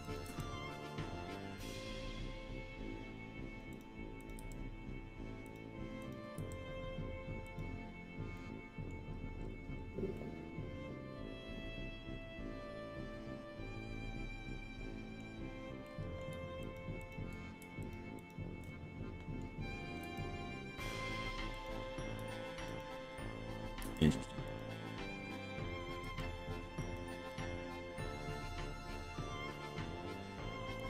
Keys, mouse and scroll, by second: 0.1 click, 0.3 g, 1.2 scroll up 2, 1.9-3.0 scroll down 5, 3.8 click, 4.5 g, 5.5 click, 6.1 click, 6.5 g, 7.5 click, 8.4 middle click, 9.4-9.9 scroll down 4, 10.2-11.8 middle drag, 12.4-15.3 middle drag, 15.9 middle click, 16.7 shift+click, 17.1 shift+click, 17.9 ctrl+click, 18.3 ctrl+click, 18.7 middle click, 20.0 g, 21.7 click, 22.7 click, 23.9 g, 24.5 click, 26.1 g, 26.9 click, 27.3-30.8 middle drag.